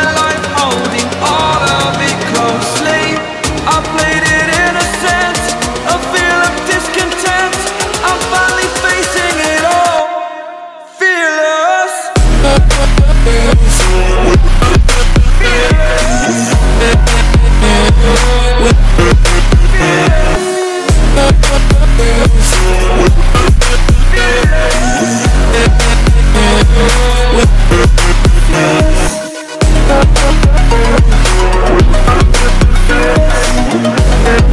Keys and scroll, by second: 0.0 Return, 13.1 Return, 20.3 ctrl+space, 21.5 ctrl+0, 24.7 ctrl+t, 25.9 Return, 33.0 ctrl+alt+shift+e.